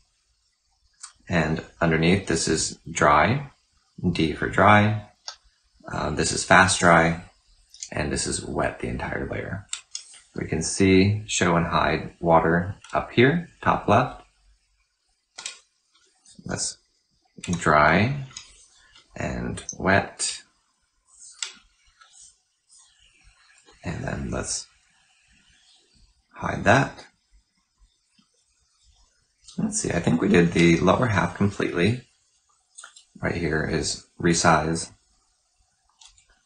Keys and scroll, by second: 3.9 typing, 5.0 typing, 7.3-8.0 typing, 11.6-12.3 typing, 16.5-17.2 typing, 19.2-20.0 typing, 24.5-25.2 typing.